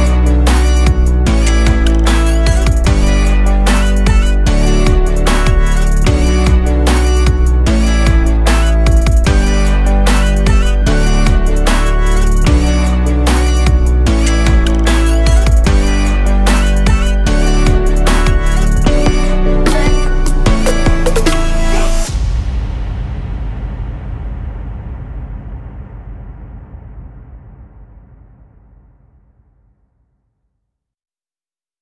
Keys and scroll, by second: 0.4 ctrl+0.